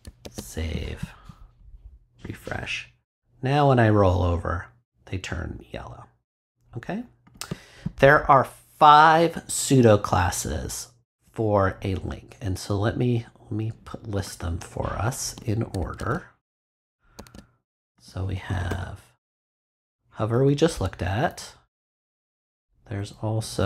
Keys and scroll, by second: 0.2 super+s, 15.9 super+x, 17.1 super+z, 18.5 Return, 19.8 Up, 22.9 Up.